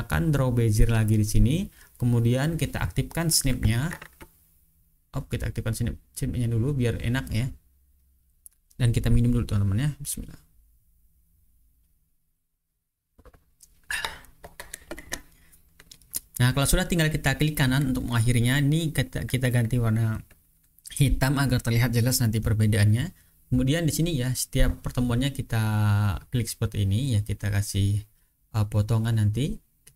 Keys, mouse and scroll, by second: 0.7 click, 2.8 click, 4.2-4.6 ctrl+scroll up 2, 4.6-5.0 ctrl+scroll down 2, 5.0 ctrl+scroll up 2, 8.2 click, 9.9 click, 11.6-14.8 drag, 16.5 click, 18.9 shift+click, 21.4 click, 22.4-25.4 drag, 25.5 right click, 26.2 ctrl+scroll down 2, 27.2-27.9 ctrl+scroll down 2, 27.9-28.8 ctrl+scroll up 2.